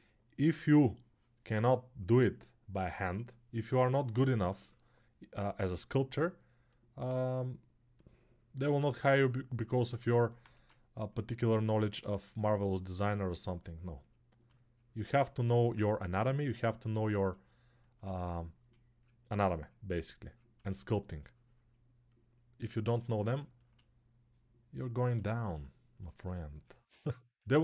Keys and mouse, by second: 10.3 1, 14.9-27.6 ctrl+drag.